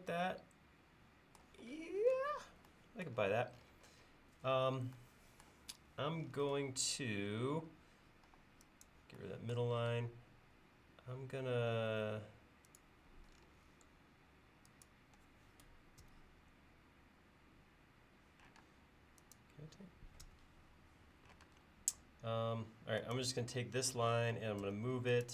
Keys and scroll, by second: 8.3 e, 10.0 space, 16.1 f, 18.7 space, 20.3 f, 21.5 space, 24.7 m.